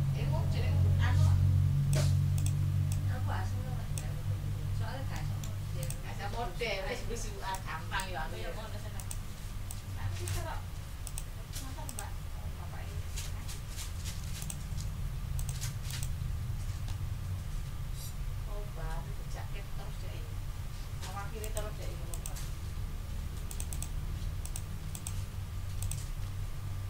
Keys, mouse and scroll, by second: 2.3 ctrl+click, 2.9-4.1 ctrl+drag, 4.6 ctrl+scroll up 2, 5.1 ctrl+middle click, 6.4 ctrl+scroll up 2, 7.5 click, 8.9 ctrl+click, 9.7 click, 11.0 ctrl+z, 11.0 ctrl+click, 11.8 click, 14.4 shift+click, 15.4 click, 15.9 click, 21.4 click, 22.1 click, 23.5 click, 24.4 click, 24.9 click, 25.8 click.